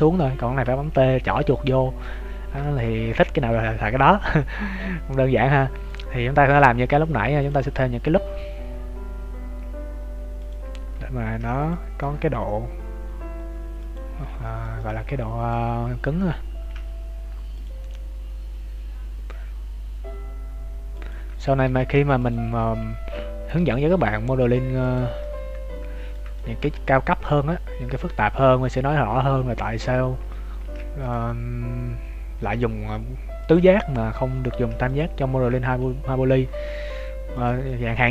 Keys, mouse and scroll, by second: 0.6 t, 1.3 t, 1.6 scroll up 1, 2.6 shift+middle click, 2.6-4.5 scroll up 1, 4.7 middle click, 6.4 ctrl+r, 11.2 ctrl+r, 14.0 scroll down 2, 14.4 shift+middle click, 14.7 middle click, 15.6-15.9 scroll up 2, 16.6 ctrl+r, 21.8 ctrl+r, 25.2 middle click, 26.3 shift+middle click, 26.7-27.3 scroll down 3, 27.3 middle click, 28.5 scroll up 2, 29.2 middle click, 29.2 scroll up 2, 30.5 ctrl+r, 34.5 ctrl+r, 37.6 middle click.